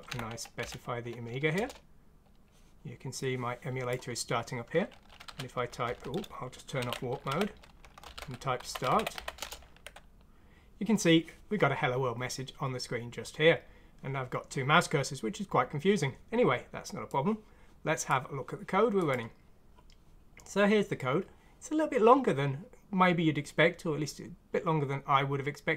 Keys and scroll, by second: 1.5 Return, 5.2 typing, 6.8 alt+w, 7.3-9.9 typing, 8.0 alt+w.